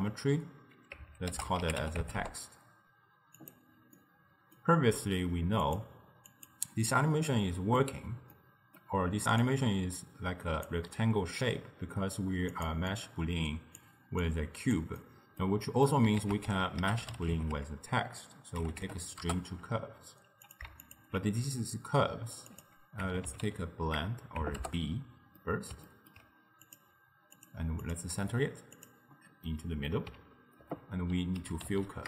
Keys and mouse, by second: 3.4 click, 4.0-5.7 middle drag, 5.7 click, 6.3 click, 7.3-9.5 middle drag, 9.5 click, 12.6 click, 12.9 click, 14.3 click, 15.1-16.3 middle drag, 16.3 ctrl+a, 20.9 alt+shift+click, 22.6-25.4 drag, 25.4-26.7 middle drag, 26.7-29.6 drag, 29.6-30.7 middle drag, 30.7 ctrl+a, 31.8 l.